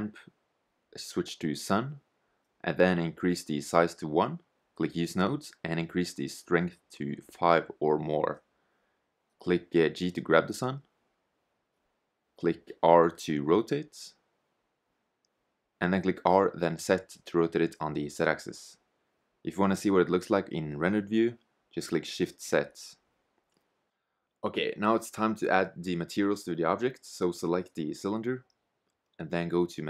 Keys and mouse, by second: 9.5 g, 12.0 g, 13.1 r, 15.9 r, 17.4 middle click, 20.0 shift+z, 22.1 shift+z, 24.8-27.9 right drag, 29.7-29.8 right drag.